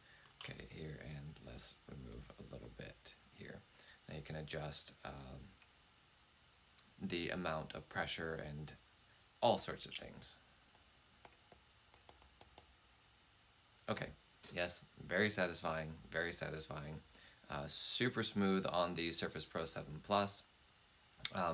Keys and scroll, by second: 0.1 5, 9.7 n.